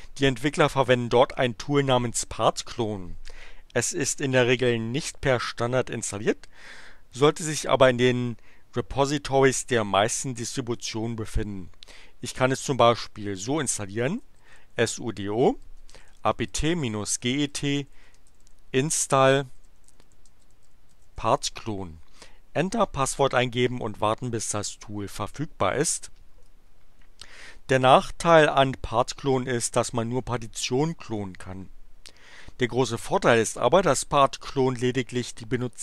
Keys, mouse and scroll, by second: 14.0-21.5 typing, 24.8 BackSpace.